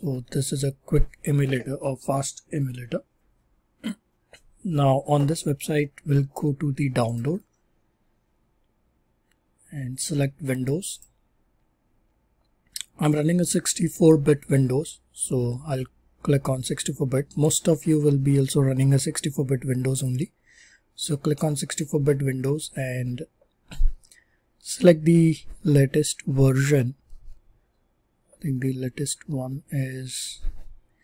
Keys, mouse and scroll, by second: 1.6 typing, 7.1-8.4 drag, 8.4-11.0 drag, 11.1 click, 11.3-12.1 drag, 20.0-23.9 drag, 25.0 click.